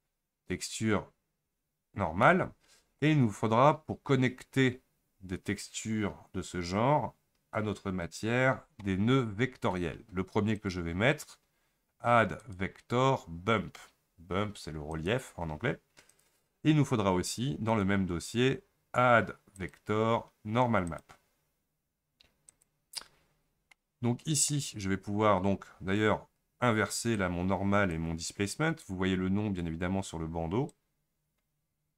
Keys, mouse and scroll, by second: 23.2 scroll up 8, 27.2-31.9 drag.